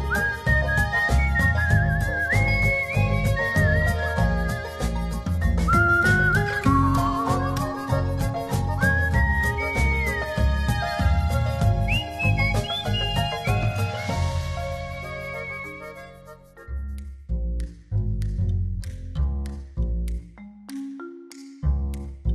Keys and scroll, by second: 2.2 u.